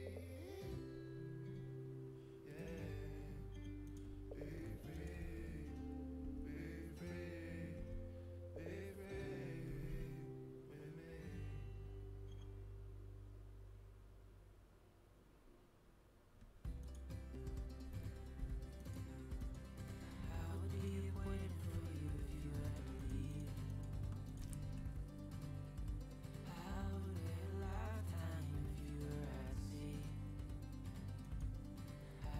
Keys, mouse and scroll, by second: 6.1 z, 7.7 z, 9.6 g, 18.8-22.5 right drag, 22.6-26.0 right drag, 24.5 a.